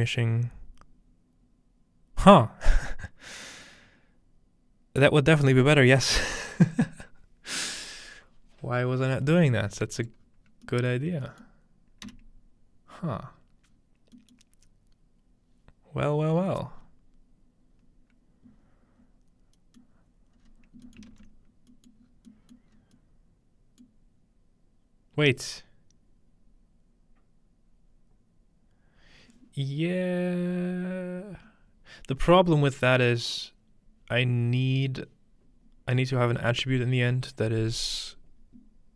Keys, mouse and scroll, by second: 10.0-11.5 drag, 10.2-12.0 scroll down 1, 11.0-11.3 middle drag, 12.1 x, 13.0-13.7 scroll up 1, 13.7 scroll down 1, 14.2-16.2 middle drag, 19.8-20.9 middle drag, 20.4 scroll up 2, 21.0-21.7 ctrl+middle drag, 21.0-21.7 scroll up 2, 21.1 ctrl+space, 21.9-22.3 middle drag, 22.1 scroll down 1, 22.7 middle click, 22.7 scroll up 1, 23.6 scroll up 1, 24.0-28.0 middle drag.